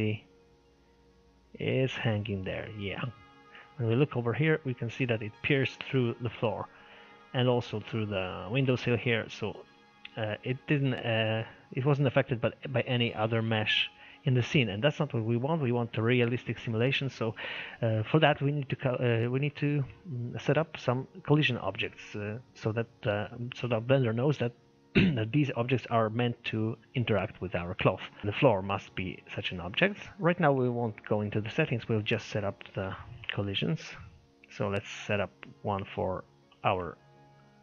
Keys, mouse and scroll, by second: 3.4 scroll down 2, 3.6-6.2 shift+middle drag, 6.2-6.6 scroll up 2, 6.6-7.1 scroll down 1, 7.1-9.3 shift+middle drag, 9.3-9.7 scroll down 2, 9.7-11.5 shift+middle drag, 11.5 scroll up 1, 15.3-15.6 scroll down 1, 16.5-18.4 shift+middle drag, 18.4 click, 21.6-25.2 shift+middle drag, 28.2 click, 29.8 click, 30.8-31.2 scroll down 5, 31.2-31.9 scroll up 5, 31.9-34.0 middle drag, 34.0 click, 36.4-37.6 drag.